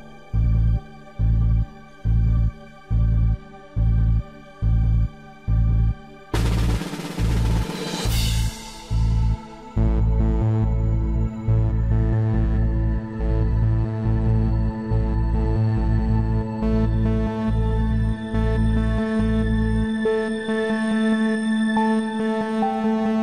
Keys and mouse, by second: 19.7-22.8 drag.